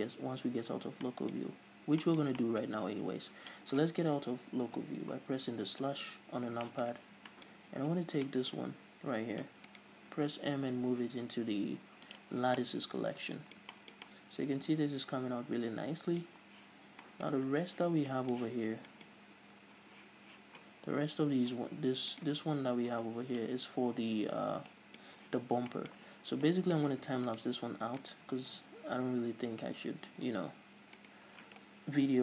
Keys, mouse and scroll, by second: 0.8-1.3 scroll up 2, 4.8 KP_Divide, 5.8 scroll down 2, 6.4-6.9 scroll up 2, 7.3 a, 7.8 a, 7.9-8.5 scroll up 1, 8.5-10.0 middle drag, 10.0 right click, 10.8 m, 12.7 scroll down 2, 12.8-22.4 middle drag, 17.0 scroll down 2, 17.6-18.3 scroll up 2, 18.9 scroll down 2, 19.3-20.0 scroll up 2, 20.0-22.4 scroll down 2, 22.4 right click, 23.0-23.4 scroll down 2, 23.4-24.9 scroll up 2, 24.9-27.6 middle drag, 27.6 shift+right click, 30.8 ctrl+z, 31.3 shift+right click.